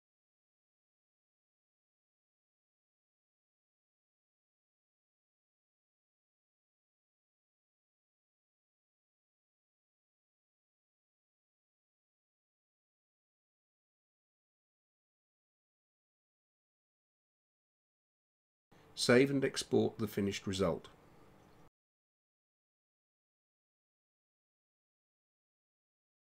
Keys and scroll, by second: 23.8-26.1 typing.